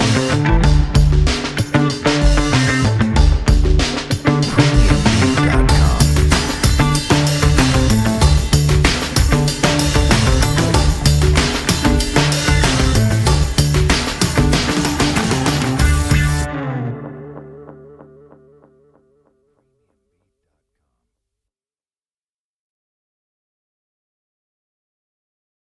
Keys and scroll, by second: 1.2 e, 2.0 w, 2.7 e, 3.2 ctrl+z, 4.8 w, 5.7 alt+F4, 8.0 z, 9.4 F4, 10.6 F4, 12.5-13.7 typing, 14.4 F4, 15.9-16.9 typing.